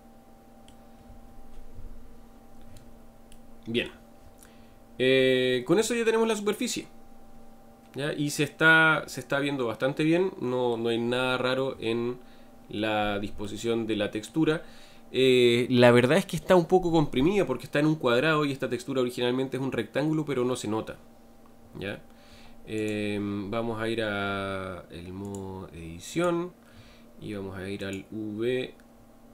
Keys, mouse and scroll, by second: 4.5-6.0 scroll down 3, 6.0-10.4 middle drag, 11.1-12.0 scroll down 3, 12.0 scroll down 2, 13.5-15.8 shift+middle drag, 15.8-16.4 scroll up 2, 21.6-22.9 scroll down 2, 22.9 click, 26.2-29.3 drag.